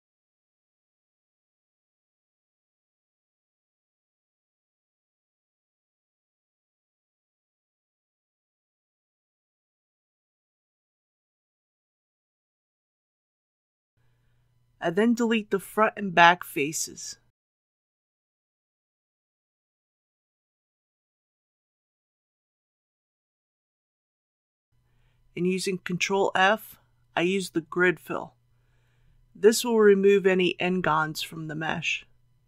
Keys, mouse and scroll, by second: 0.4 KP_1, 1.4 shift+middle click, 2.1-3.4 middle drag, 4.1 ctrl+b, 10.3-11.0 scroll up 1, 11.8 click, 16.8 3, 17.6 click, 18.1 middle click, 19.4 shift+click, 20.4 shift+x, 21.6 click, 24.9 2, 26.3 alt+click, 31.4 ctrl+f.